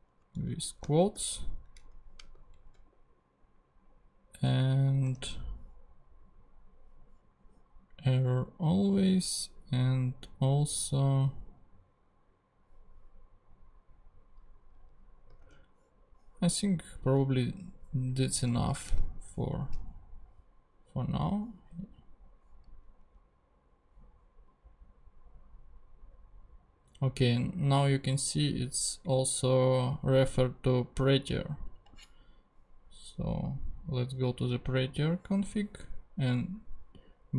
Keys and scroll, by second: 1.1 alt+shift+', 1.7 shift+', 2.5 super+Right, 5.0 super+Tab, 15.4 super+Tab, 18.9 ,, 19.5 ctrl+,, 19.6 ctrl+Tab.